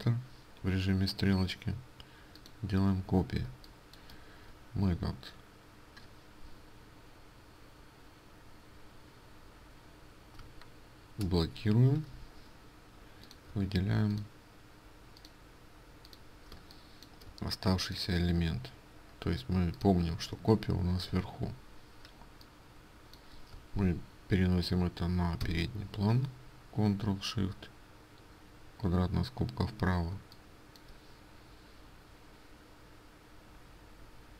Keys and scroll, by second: 11.7 ctrl+2.